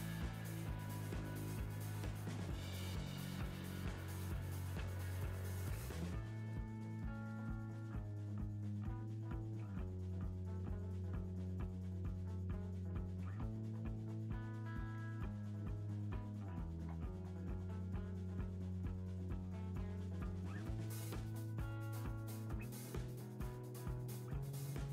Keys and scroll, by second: 6.2 Right, 13.6 Right, 18.0 Right, 21.7 Right, 22.4 Right.